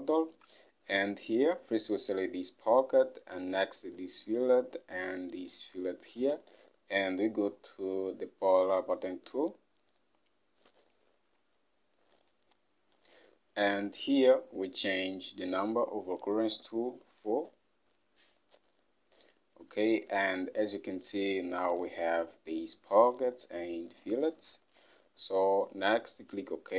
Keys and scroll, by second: 17.2 4, 24.7 Home.